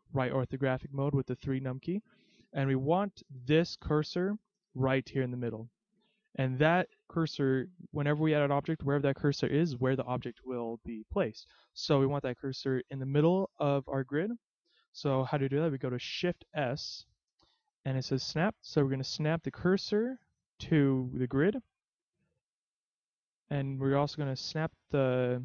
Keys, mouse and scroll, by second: 0.6-1.4 scroll up 5, 2.6-4.2 scroll down 4, 5.9 scroll down 1, 12.8-15.8 scroll up 3, 16.7 shift+s, 22.3-22.6 shift+scroll up 1, 22.6-23.8 scroll down 4, 23.8 shift+s.